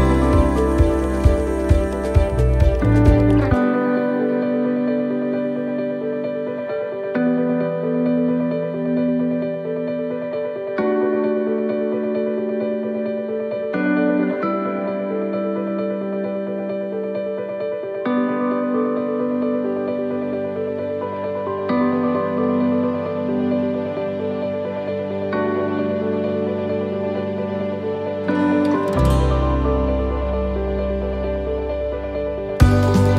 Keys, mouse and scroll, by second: 4.6 click, 26.0 click, 27.4 shift+middle click, 28.1 right click, 29.3 click, 33.0 right click.